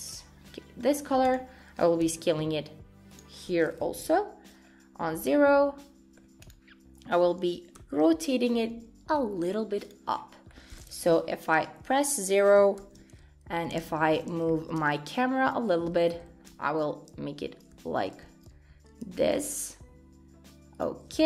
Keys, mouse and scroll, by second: 0.1 click, 0.5 middle click, 1.0 scroll down 3, 1.2 click, 2.2 s, 4.0 KP_0, 4.7-5.2 scroll up 1, 5.2-5.5 scroll down 1, 5.5 middle click, 6.4 click, 7.8 KP_1, 8.7 r, 10.2-10.6 scroll down 4, 10.5 middle click, 11.1 KP_0, 11.6 scroll down 1, 12.8 shift+`.